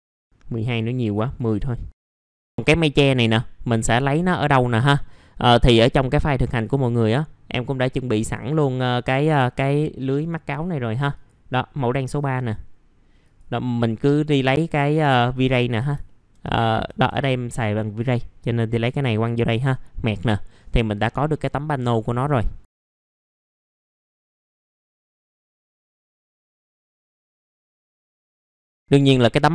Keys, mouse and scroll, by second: 0.1 scroll down 1, 0.2-1.4 scroll up 1, 1.4 click, 1.9 KP_1, 2.1 middle click, 2.5-4.3 scroll up 1, 4.8 middle click, 5.0-5.3 scroll down 1, 5.3 middle click, 6.5-7.5 drag, 15.6 middle click, 15.7 scroll down 1, 16.0 alt+middle click, 17.0 Tab, 17.7 click, 24.9 click, 28.7 middle click, 28.8-29.2 scroll down 1.